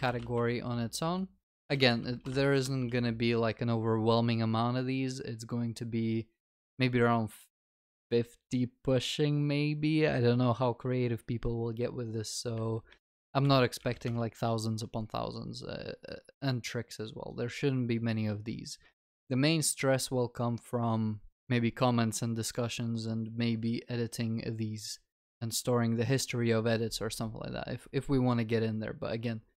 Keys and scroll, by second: 1.9 ctrl+s.